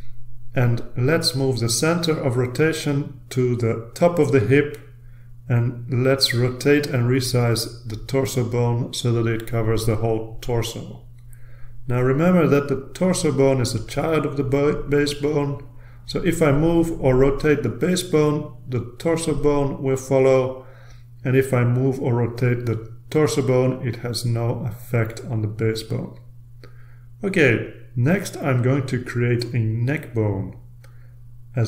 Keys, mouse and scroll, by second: 0.1-1.2 drag, 2.3-3.2 drag, 3.5-4.9 typing, 5.1 Return, 6.5-7.2 scroll down 2, 8.1-9.2 drag, 9.7-11.2 drag, 11.2-12.3 scroll up 2, 12.4-13.1 scroll up 2, 13.8-15.3 drag, 15.3-15.9 ctrl+scroll down 2, 15.9 ctrl+scroll down 1, 16.4-17.1 scroll down 1, 18.3-19.5 drag, 21.8-23.3 drag, 24.0-25.0 drag, 25.6-26.5 drag, 27.3 ctrl+z, 27.7 ctrl+z, 28.6 ctrl+z, 29.3 ctrl+z.